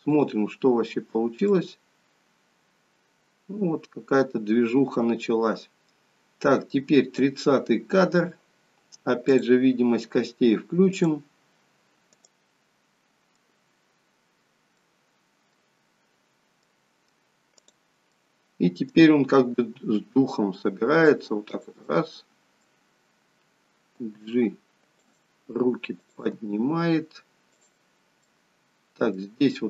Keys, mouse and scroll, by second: 0.1 click, 1.5 click, 9.2 click, 12.2 middle click, 14.7 middle click, 16.6 middle click, 17.6 click, 18.2 middle click, 19.5 g, 21.8 middle click, 24.0 g, 25.9 click, 26.2 g, 28.3 middle click.